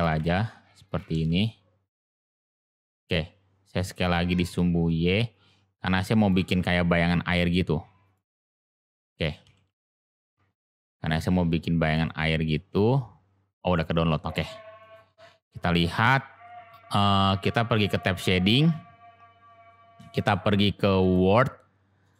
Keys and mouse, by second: 0.1 g, 2.4-2.8 middle drag, 3.8 s, 6.3 g, 11.9-13.8 middle drag, 14.8 click.